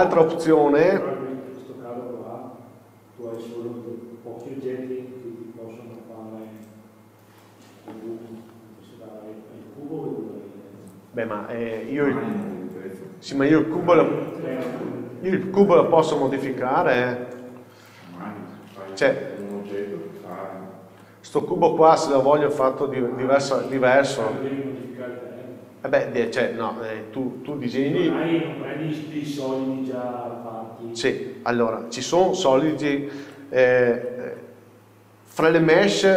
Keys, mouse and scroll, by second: 0.4 scroll up 1, 1.0 scroll down 1, 12.4 click, 14.0 middle click, 15.0 scroll up 1, 18.2 KP_4, 19.5 shift+click, 23.9 click, 24.7 Tab, 25.9 scroll down 1, 26.4-34.0 middle drag, 32.2 shift+s, 33.4 Escape, 34.0 shift+a.